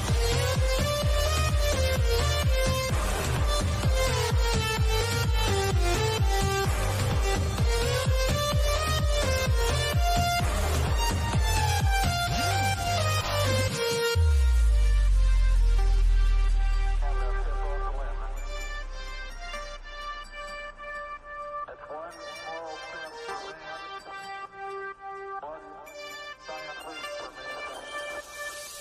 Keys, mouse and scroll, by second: 3.8 click, 6.2 scroll down 1, 6.7 middle click, 6.8-11.1 middle drag, 11.1 click, 15.9 scroll up 1, 18.0 click, 27.7 click.